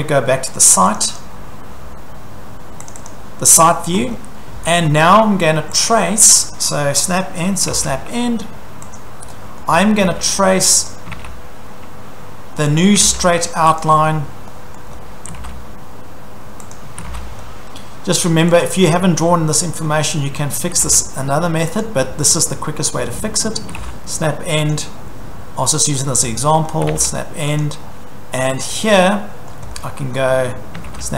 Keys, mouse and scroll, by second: 1.0 click, 1.2 click, 2.9 click, 3.1 click, 4.1-5.8 scroll, 5.8 click, 6.2-6.6 scroll, 7.4-8.3 typing, 9.0 click, 9.8 scroll, 10.0-11.6 typing, 10.9 click, 12.8 click, 13.0 s, 13.8 click, 14.1-14.6 scroll, 14.6 e, 14.8 scroll, 15.3 s, 16.8 click, 16.8-18.0 typing, 17.3-18.5 scroll, 18.6 click, 18.8-19.5 scroll, 19.5-20.1 scroll, 19.8-21.3 typing, 21.8 click, 22.1-22.6 scroll, 22.8-24.2 typing, 24.7 click, 25.0-25.7 scroll, 25.7-26.9 typing, 26.2-26.8 scroll, 26.9 middle click, 27.6 click, 27.8 scroll, 28.7 scroll, 28.8-29.6 typing, 29.5 scroll, 29.8 middle click, 30.1-30.8 scroll, 30.2 middle click, 30.8 s.